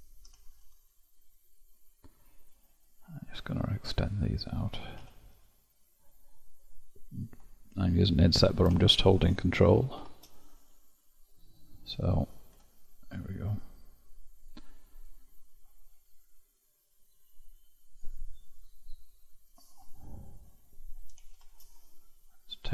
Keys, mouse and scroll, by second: 2.8-3.8 middle drag, 3.8 click, 7.7-9.9 middle drag, 9.9 shift+z, 11.3-12.5 middle drag, 12.5 Tab, 13.6-16.6 middle drag, 21.3 shift+z, 22.5 click.